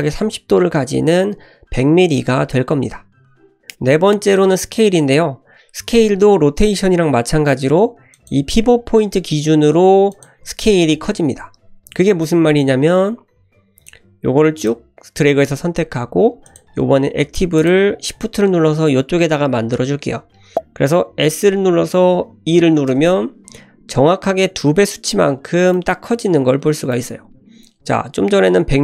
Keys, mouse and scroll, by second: 8.1-10.2 drag, 13.8 click, 16.5 shift+click, 17.6 shift+click, 20.5 ctrl+z, 20.5 s, 21.1 s, 25.0 scroll down 1, 25.7 shift+middle click, 26.5-26.9 scroll up 1, 26.9 shift+middle click, 27.5 ctrl+z, 28.0-28.3 scroll up 1.